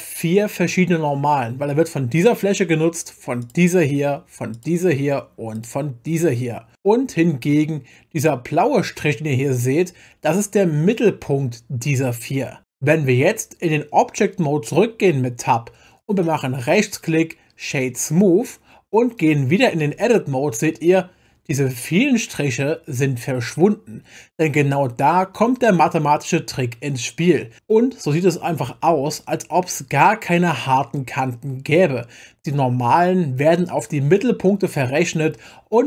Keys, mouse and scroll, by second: 2.2 click, 3.4 click, 4.5 click, 5.5 click, 7.2-8.3 middle drag, 12.6 Tab, 16.6-18.2 right drag, 19.9 Tab, 28.8 Tab.